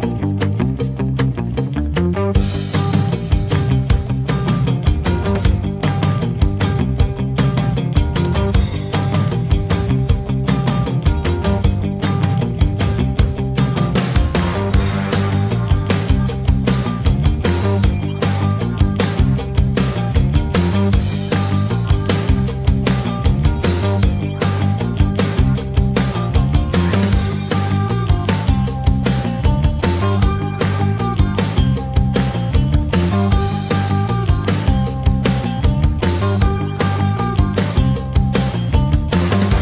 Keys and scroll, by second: 30.2 ctrl+z, 30.6 ctrl+q.